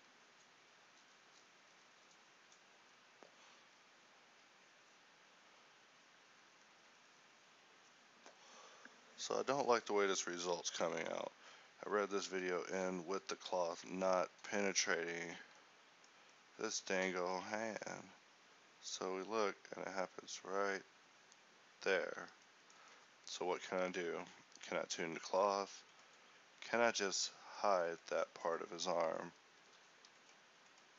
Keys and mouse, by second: 12.6 Escape, 24.5 a, 27.7-30.2 middle drag, 30.2 a.